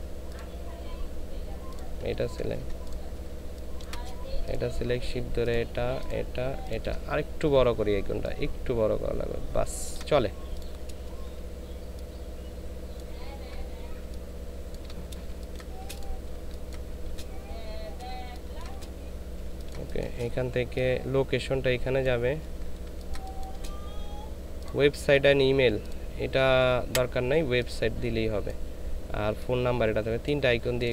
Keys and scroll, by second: 3.3 ctrl+space, 15.3 ctrl+shift+space, 16.3 ctrl+space, 18.1 ctrl+space, 22.9 ctrl+space.